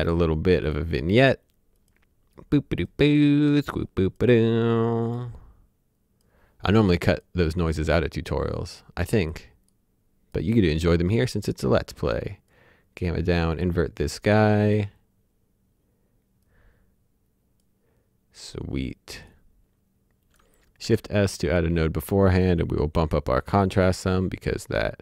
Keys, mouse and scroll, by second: 0.6 click, 7.4-8.8 scroll down 1, 8.8 click, 16.4 click, 19.2 click, 20.8 shift+s, 21.5 click, 23.9 click.